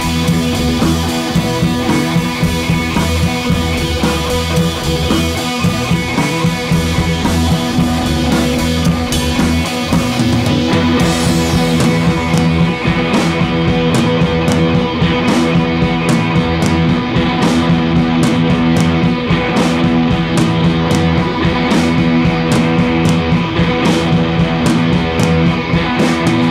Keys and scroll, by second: 16.4 Left, 16.5 Left, 22.5 Right.